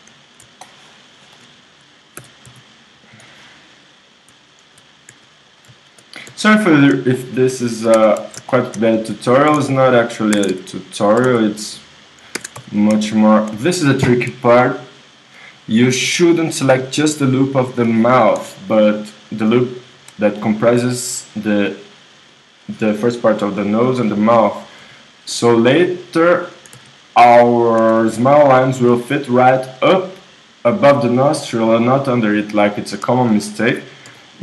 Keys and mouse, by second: 0.6-2.2 middle drag, 2.2 w, 3.7-5.1 drag, 5.1 s, 6.3-8.0 drag, 6.3 s, 8.0 KP_1, 8.5 z, 9.0-12.5 drag, 9.5 s, 10.4 ctrl+Tab, 11.2 s, 12.3 ctrl+Tab, 13.5-15.0 drag, 19.1-20.4 right drag, 20.4-24.1 middle drag, 24.8 i, 26.3 click, 26.7 s, 32.9-34.4 drag, 34.1 i.